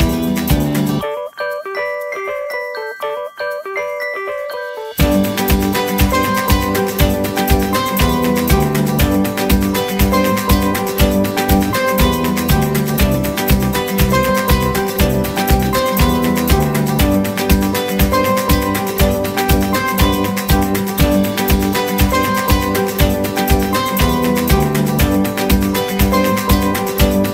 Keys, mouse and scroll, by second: 6.3-9.3 typing, 10.7 typing, 11.9-16.4 typing, 17.6-19.6 typing, 21.0-24.4 typing, 25.9 typing.